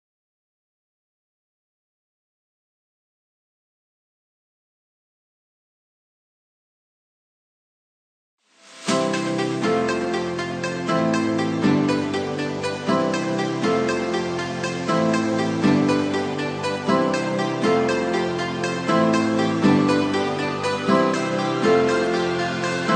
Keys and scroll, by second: 0.7 ctrl+c, 1.0 ctrl+v, 16.8 Up, 17.9 Right, 18.6 Down, 22.0 Up.